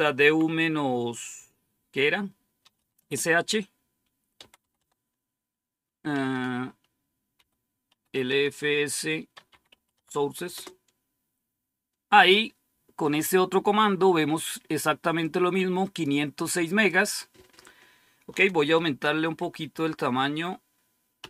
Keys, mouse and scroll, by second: 0.0-0.1 typing, 2.3-3.2 typing, 4.3-4.6 typing, 4.6 Tab, 6.0-12.0 typing, 15.1 click, 16.8 click, 19.2 ctrl++, 19.6 ctrl++, 21.1 ctrl+-.